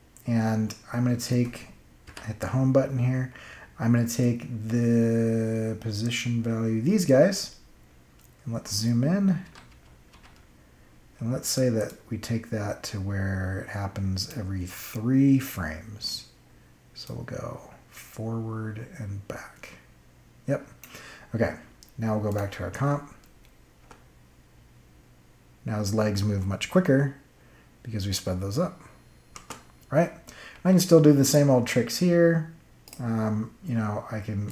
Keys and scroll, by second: 2.0 Home, 9.4 =, 23.7 space, 29.3 space.